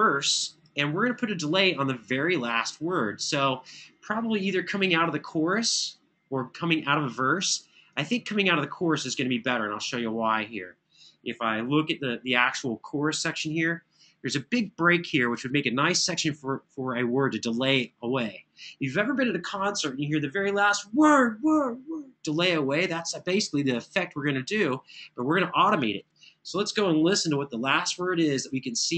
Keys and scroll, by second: 0.7 super+=, 11.3 alt+f, 13.3 super+[, 27.0 super+].